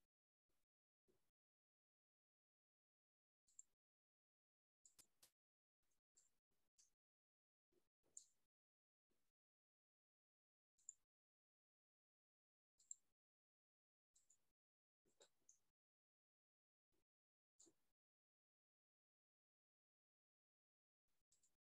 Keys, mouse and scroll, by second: 0.5 click, 0.5 scroll, 1.0-1.4 scroll, 4.0 click, 6.0 shift+click, 11.3 click, 12.3 click, 13.3 click, 14.9 shift+click, 21.5 click.